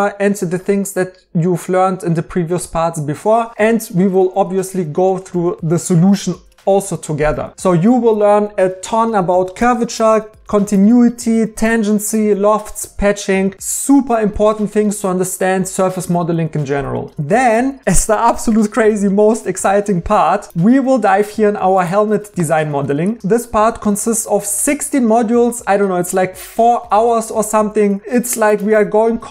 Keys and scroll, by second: 20.5 e.